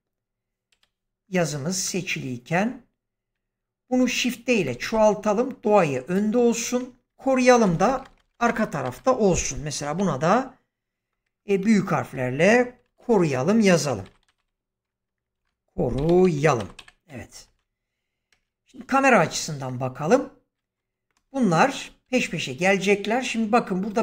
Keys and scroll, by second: 0.6 /, 3.8 shift+d, 7.0 Tab, 7.8 BackSpace, 9.9 k, 12.8 o, 13.8-14.2 typing, 15.3-16.7 typing, 17.4 Tab, 18.2 0, 21.0 space.